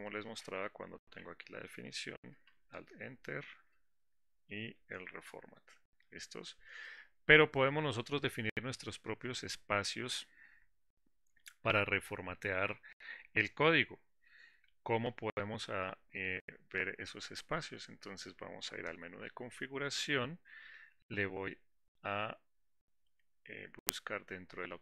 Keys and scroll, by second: 3.1 alt+Return, 20.0 ctrl+alt+s.